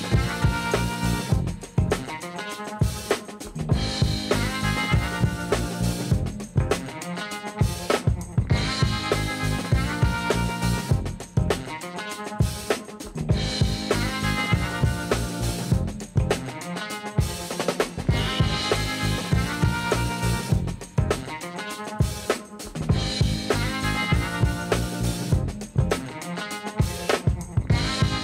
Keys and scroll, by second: 1.0 shift+z, 5.6 shift+d, 7.3 r, 8.7 shift+z, 16.6 shift+d, 16.9 x, 19.0 Tab, 21.1 shift+s, 22.4 Tab, 25.1 q.